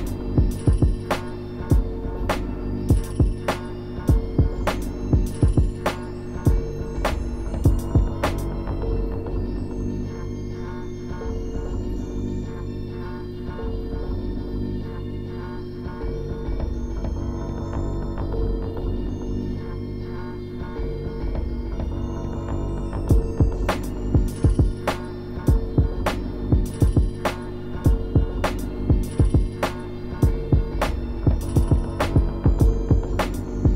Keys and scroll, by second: 4.7 scroll down 1, 5.6-6.1 scroll up 2, 6.4 scroll down 1, 6.4 scroll up 1, 7.3 scroll down 1, 9.9 scroll up 1, 10.4 scroll down 1, 11.3 scroll down 1, 11.7 ctrl+z, 11.9 ctrl+z, 13.6 scroll up 1, 13.8 space, 14.2 scroll up 1, 15.9 scroll down 1, 17.9 ctrl+z, 19.5-20.4 scroll up 3, 20.4 scroll down 1, 20.5 scroll up 1, 20.6 scroll down 1, 25.8 ctrl+z, 27.5 scroll up 1, 28.7 scroll down 1, 28.8-29.4 scroll up 2, 33.6 scroll down 1.